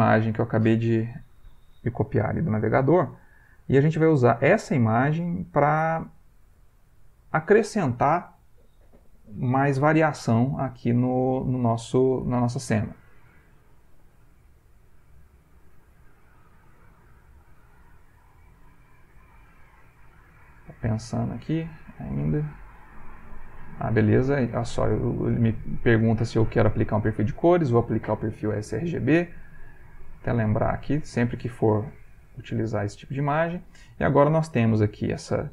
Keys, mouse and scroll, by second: 11.6 middle click, 11.6-12.4 scroll up 1, 15.1 click, 16.9 click, 19.1 click, 20.9 middle click, 25.4 click, 30.0 click, 30.6 click, 32.0 click, 32.9 ctrl+click, 33.4 ctrl+click, 34.8 ctrl+t, 35.4 ctrl+middle click.